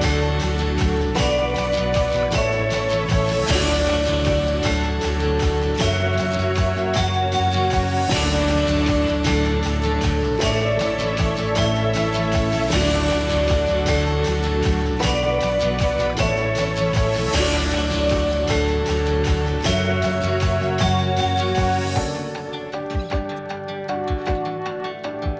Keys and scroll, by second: 3.3 typing, 3.4 Return, 5.1 Escape, 5.2 Escape, 5.4 Escape.